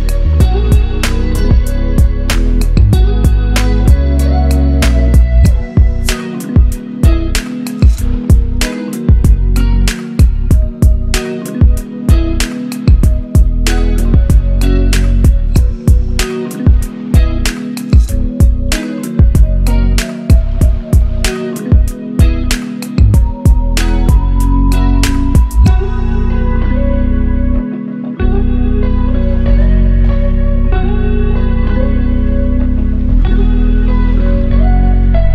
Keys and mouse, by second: 4.9 shift+drag, 6.9 shift+drag, 8.7 shift+click, 11.5-15.9 middle drag, 15.9 shift+click, 17.1 shift+drag, 19.0 shift+drag, 20.1 shift+drag, 21.1-23.1 middle drag, 23.1 shift+click, 23.9 shift+click, 24.6-27.4 middle drag, 27.4 shift+click, 29.3 shift+click, 30.1-33.2 middle drag, 34.1 shift+click, 35.0 shift+click.